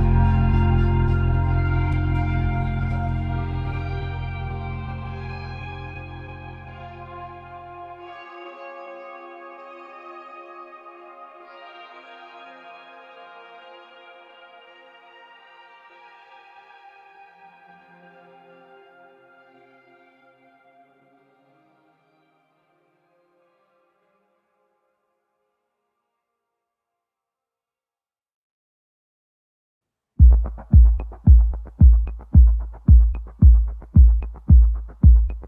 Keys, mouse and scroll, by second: 3.1-4.2 drag, 4.2-6.7 middle drag, 7.0 click, 11.2-15.5 drag, 13.0-15.4 middle drag, 16.4 Tab, 17.1 click, 18.1 3, 18.3 click, 18.8-20.7 middle drag, 20.7 i, 28.5 e, 34.3 shift+s.